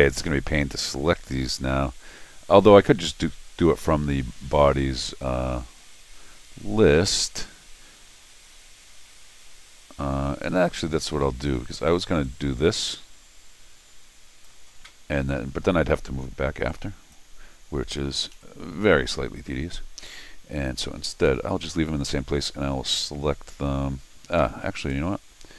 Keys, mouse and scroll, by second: 12.2-14.4 drag, 16.7 click, 18.3 0, 21.1 click, 24.4 Escape, 24.8 right click.